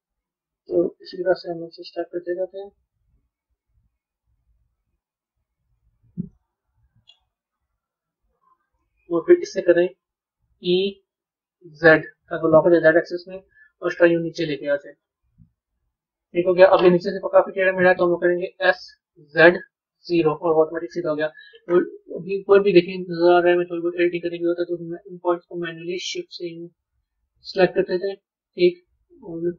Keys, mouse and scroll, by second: 6.2-7.6 middle drag, 7.6 KP_3, 23.6 click, 25.4 shift+click, 27.9 click.